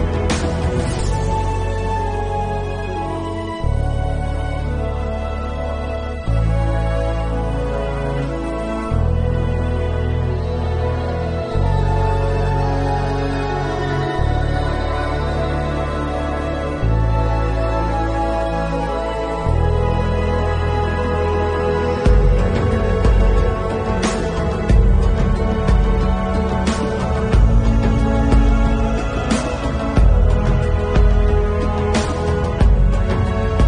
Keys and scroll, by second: 0.7 ctrl+alt+z, 1.9 ctrl+s, 2.5 ctrl+alt+z, 3.5 ctrl+alt+z, 4.2 ctrl+alt+z, 4.7 ctrl+alt+z, 5.3 ctrl+alt+z, 6.3 ctrl+s, 7.2 ctrl+alt+z, 7.6 ctrl+alt+z, 8.9 ctrl+s, 15.4 ctrl+s, 16.4 ctrl+s, 23.9 p, 25.7 ctrl+Return, 25.8 Delete, 26.0 ctrl+d, 26.1 ctrl+s, 27.0 8, 27.3 [, 28.6 ], 28.7 8, 31.0 ctrl+s, 32.1 ctrl+alt+z, 32.8 ctrl+alt+z, 33.5 ctrl+alt+z.